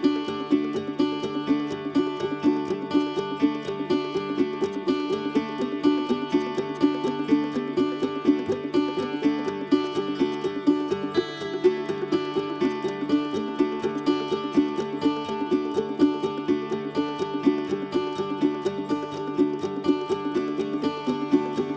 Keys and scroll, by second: 14.9 2, 15.0 Return, 17.6 Escape, 17.9 Escape.